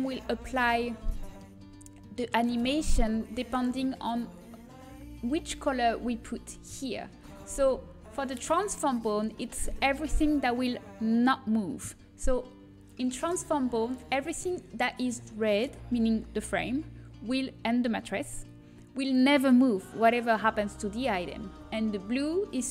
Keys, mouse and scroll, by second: 1.0-4.1 middle drag, 9.2-11.4 middle drag, 13.6-14.6 middle drag.